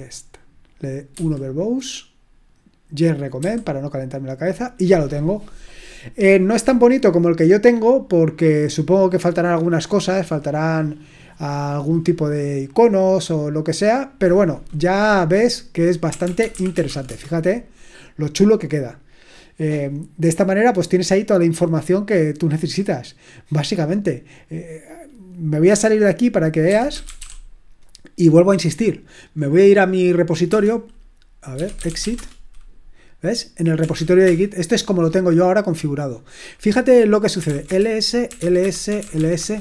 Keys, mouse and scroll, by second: 1.1 1, 3.4 typing, 15.8-17.3 typing, 26.4-27.6 typing, 31.3-32.5 typing, 33.5-34.4 typing, 37.1-39.6 typing.